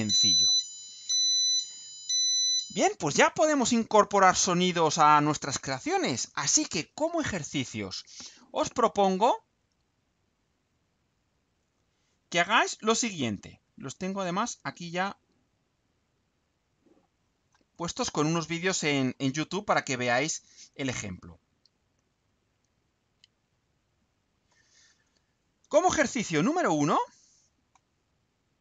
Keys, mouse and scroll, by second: 11.7 click, 13.2 click, 14.9 click, 16.6 click, 17.2-18.4 scroll down 2, 18.4-19.3 scroll down 1, 19.7-24.6 drag, 24.7-25.6 scroll down 2, 25.8 scroll up 2, 26.8 click.